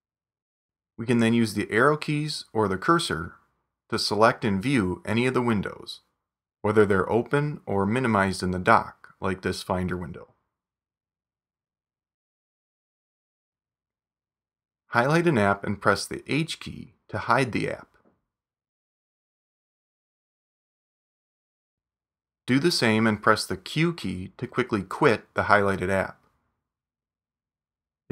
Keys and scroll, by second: 13.3 super+Tab, 18.0 super+h, 20.0 super+Tab, 21.5 super+Tab, 26.3 super+q.